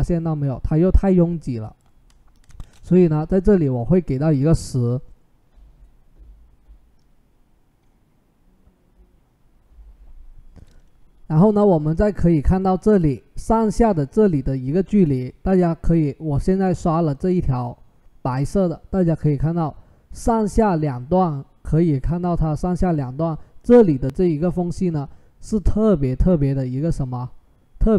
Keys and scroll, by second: 2.0-2.9 typing.